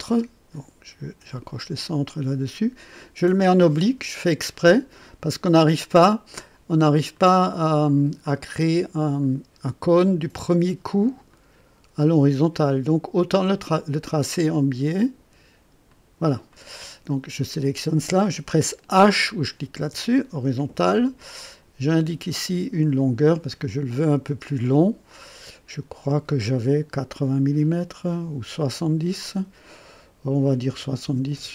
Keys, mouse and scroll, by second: 1.3 click, 3.4 click, 4.7 right click, 7.1 click, 7.8 click, 9.0 click, 11.3 click, 13.4 click, 15.9 click, 16.5 right click, 17.5 click, 19.8 h, 22.0 click, 25.1 click, 30.7 KP_7, 31.0 KP_0, 31.3 KP_Enter.